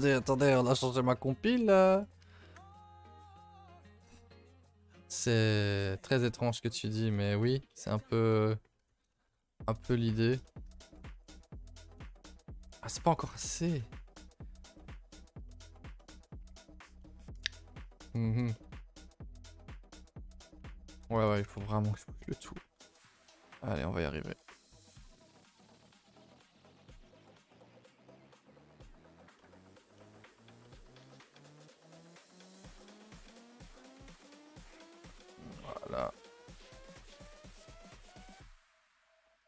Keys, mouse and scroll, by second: 0.0-0.7 typing, 2.0 z, 2.2 a, 2.4 a, 3.5 z, 3.7 Tab, 4.1 a, 4.2 a, 4.7 Tab, 5.8 click, 6.6 Tab, 7.5 z, 8.8 alt+h, 9.2 a, 9.3 a, 9.4-11.0 middle drag, 11.0 click, 11.1 Tab, 11.3 middle click, 11.6 a, 11.8 a, 12.0 3, 12.2 middle click, 12.7 scroll down 2, 12.9 middle click, 13.2 scroll up 1, 13.4 KP_0, 14.7 middle click, 15.1-16.0 scroll up 7, 15.5 shift+middle click, 16.0 middle click, 16.5-18.8 middle drag, 18.8 scroll up 1, 19.1-20.5 middle drag, 20.5 scroll up 1, 20.7 Tab, 21.0 middle click, 21.1 a, 21.3 a, 21.7 middle click, 22.4 click, 22.5 Tab, 22.6 middle click, 22.8 a, 23.0 a, 23.6 click, 25.0 h, 26.2 l, 26.4 middle click, 27.1 g, 29.0 click, 29.4 middle click, 29.7 scroll up 1, 30.0 middle click, 30.3-30.6 scroll up 1, 30.6 middle click, 31.0 r, 32.2 g, 33.2 g, 35.7 middle click, 36.4 alt+h, 36.8 a, 36.9 a, 37.2 Tab, 37.3-38.0 middle drag, 38.0 Tab, 38.3 KP_0, 38.8 KP_7.